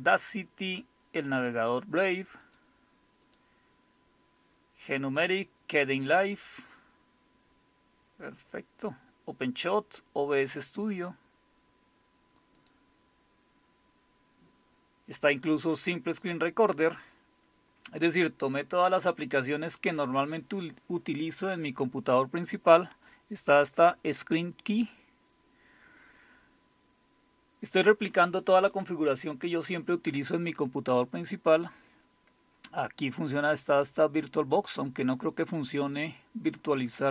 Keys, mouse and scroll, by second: 2.4 click, 12.6 click.